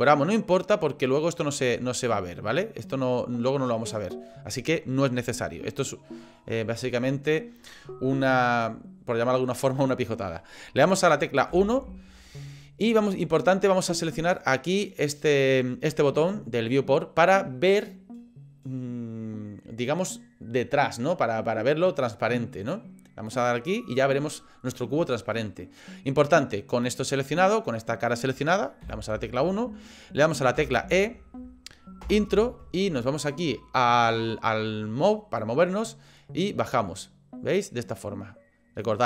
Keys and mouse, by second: 11.5 KP_1, 23.3 click, 25.8 middle click, 28.8 KP_1, 30.6 e, 36.4-39.0 drag.